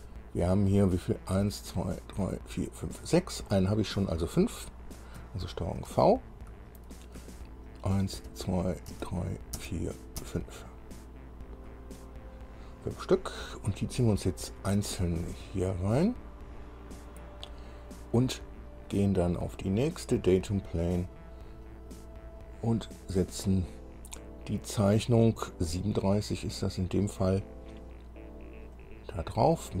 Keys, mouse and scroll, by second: 6.0 ctrl+v, 6.8-7.2 ctrl+scroll down 2, 8.4 ctrl+v, 9.1 ctrl+v, 10.2 ctrl+v, 10.7 ctrl+v, 10.7 ctrl+scroll down 2, 13.9 scroll up 2, 15.2-17.2 drag, 19.8 click, 21.3 click, 22.6 click, 26.9 click, 29.0 click.